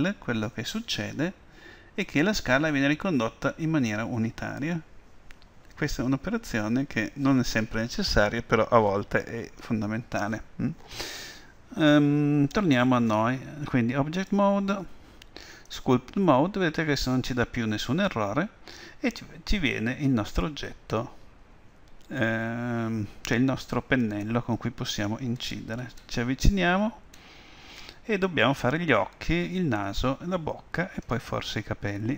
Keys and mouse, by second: 14.2-16.7 drag.